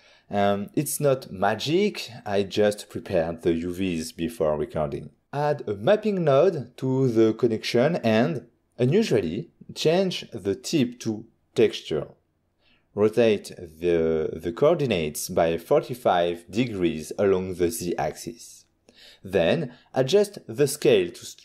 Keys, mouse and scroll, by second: 2.4 shift+a, 2.7 click, 3.5-4.0 typing, 4.7 Return, 6.9 click, 9.1 click, 9.3 click, 10.5 click, 10.7 click, 11.8 ctrl+middle click, 17.0 click, 18.7 typing, 19.3 Return.